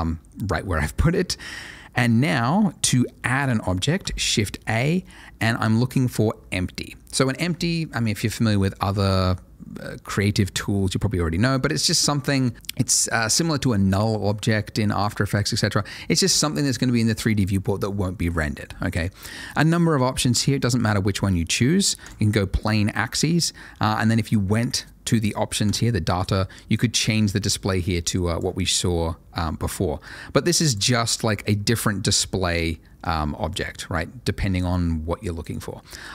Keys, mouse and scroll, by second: 3.8 shift+a, 22.0 click, 25.6 click, 28.7-29.2 scroll down 1, 29.2-30.0 scroll up 1, 30.0 click, 31.1 middle click, 31.4-33.0 scroll down 1, 33.0 click, 35.5 double click.